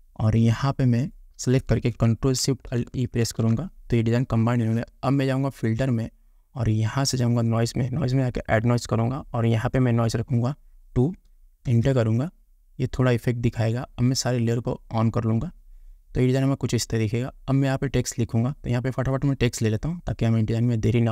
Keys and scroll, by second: 12.0 Return.